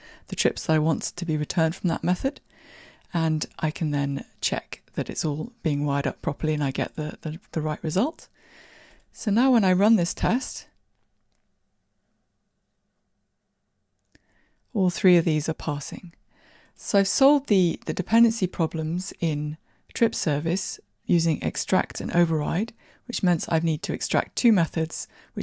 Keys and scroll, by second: 9.7 ctrl+r, 9.7 shift+F10, 17.4 shift+Escape.